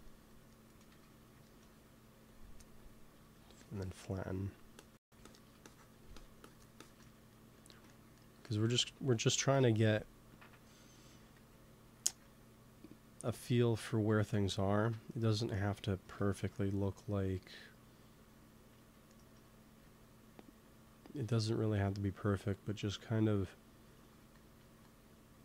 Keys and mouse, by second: 0.8 x, 2.2-3.4 drag, 3.1 f, 4.3-8.5 drag, 8.6 ctrl+s, 9.4 KP_1, 11.1-14.2 drag, 14.2-16.0 middle drag, 16.0 ctrl+s, 19.0 middle click, 19.7 ctrl+s, 24.1-25.4 drag, 24.5 ctrl+s.